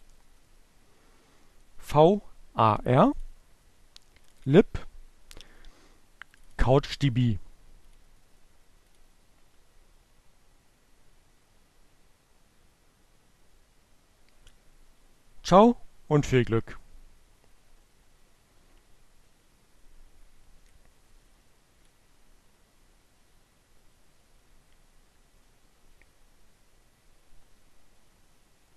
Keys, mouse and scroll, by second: 0.0 click, 2.8 click, 3.8 click, 6.4 click, 7.9 click, 8.7 click, 18.2-19.5 drag.